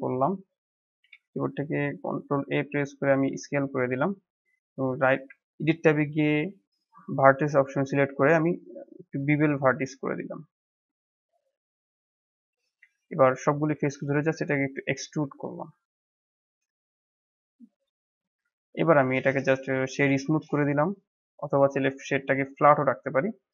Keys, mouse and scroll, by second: 1.1 ctrl+a, 5.2 Tab, 7.1 click, 7.7-10.7 right drag, 12.5 middle click, 13.2 a, 13.8 e, 15.1 Tab, 15.4-15.7 scroll down 4, 15.7-16.5 middle drag, 16.5-18.0 right drag, 18.0-18.7 drag, 19.2-20.3 right drag, 20.3-21.0 middle drag, 21.0-21.6 scroll up 1, 21.6-22.8 right drag, 22.8-23.3 middle drag, 23.3 click.